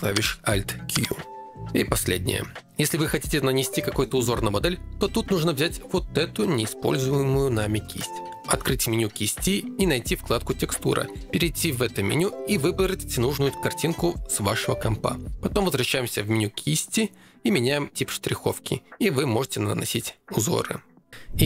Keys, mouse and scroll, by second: 0.7 alt+q, 5.7 click, 9.0 click, 11.2 click, 12.9 click, 15.2 click, 18.2-19.7 drag, 21.0 click.